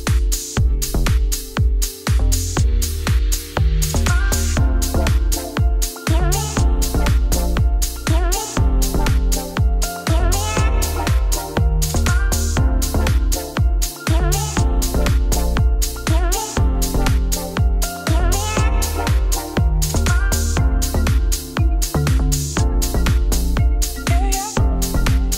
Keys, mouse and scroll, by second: 0.3 middle click, 0.8 r, 1.6 middle click, 2.0 s, 2.5 middle click, 3.0 s, 3.9 g, 5.0 middle click, 5.2 Tab, 5.6 KP_1, 5.8 KP_3, 6.8 alt+d, 8.4-9.4 middle drag, 9.4 click, 9.7 KP_Divide, 10.0-11.4 middle drag, 11.4 Tab, 11.5 scroll down 3, 11.7 KP_Divide, 12.1 middle click, 13.1 click, 13.8-16.9 shift+drag, 16.9 KP_1, 17.1 KP_3, 17.6 shift+middle click, 18.0 alt+d, 19.2-21.1 middle drag, 21.1 scroll down 1, 21.3-21.6 scroll up 10, 21.8-22.3 scroll down 3, 22.3 g, 23.8 middle click, 24.2 scroll down 1.